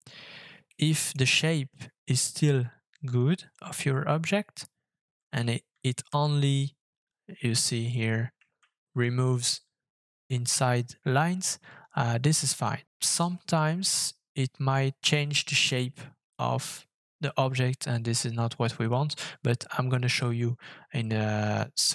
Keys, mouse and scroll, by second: 0.6 scroll down 1, 0.8 scroll up 1, 6.0 ctrl+z, 8.5 ctrl+shift+z.